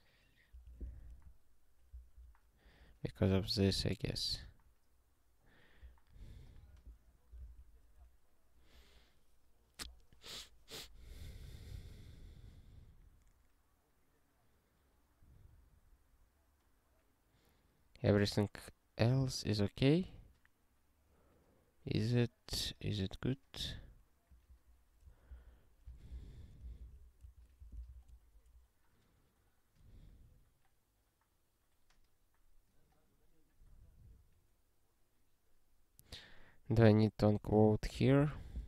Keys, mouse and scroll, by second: 0.5 ctrl+d, 1.0 ctrl+s, 1.9 ctrl+e, 3.4 scroll down 1, 4.0 scroll up 2, 4.6 scroll down 1, 5.6 scroll down 1, 6.5 click, 7.5 ctrl+e, 24.3 click, 25.3 ctrl+n, 25.8 ctrl+f, 26.1 ,, 26.9 ctrl+alt+@, 27.2 Tab, 27.9 ctrl+s, 37.1 BackSpace, 38.1 ctrl+alt+@, 38.3 Tab.